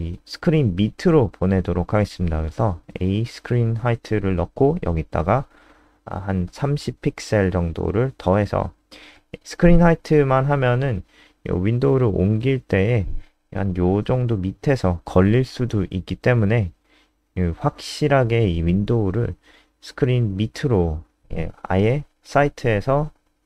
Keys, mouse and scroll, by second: 1.7-4.0 typing, 7.5-8.2 typing, 9.3 super+n, 11.5 click, 13.3 alt+click, 15.4 alt+click, 18.4 alt+click, 18.9 click, 19.1 alt+F4, 19.4 click, 20.1 Right, 20.2 Left.